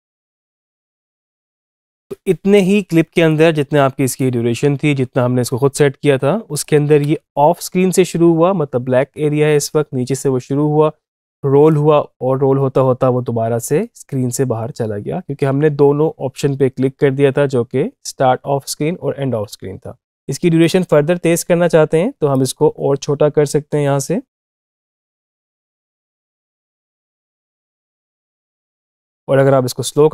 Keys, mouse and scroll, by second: 1.6 space, 3.1-6.2 drag, 6.4 click, 6.7 Up, 20.4-24.8 drag, 24.8 space, 28.7 space.